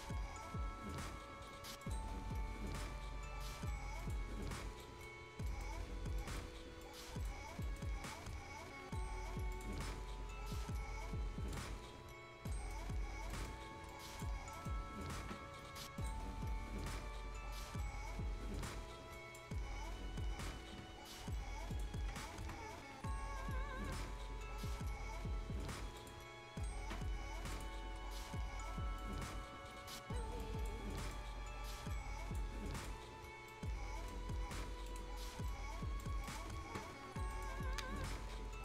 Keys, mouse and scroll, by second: 1.8 click, 4.3 scroll down 1, 4.8 right click, 5.2-5.5 scroll up 1, 5.5 right click, 5.7-6.2 scroll down 1, 6.2 right click, 6.6 scroll up 1, 6.8 click, 7.4 scroll up 1, 7.6 right click, 9.5 click, 11.7 scroll down 1, 12.1-12.5 scroll up 1, 12.5 right click, 12.9 scroll up 1, 13.2 scroll down 1, 13.3 right click, 13.6-13.9 scroll up 1, 13.9 click, 14.4 scroll up 1, 14.5 right click, 16.0-19.2 drag, 19.8-20.1 scroll down 1, 20.1-20.6 scroll up 1, 21.7 click, 21.7 click, 26.0 click, 26.4 scroll down 1, 27.5 click, 28.1 scroll up 1, 29.0-30.4 drag, 31.0 click, 32.5 scroll down 1, 32.8 click, 33.1 scroll down 1, 33.5-34.9 right drag, 34.9 click, 34.9 click, 35.2 scroll down 1, 35.3 scroll up 1, 35.5 right click, 36.1 scroll down 1, 36.3 right click, 37.3 click, 37.8 scroll down 1, 38.1 scroll up 1, 38.4 scroll down 1.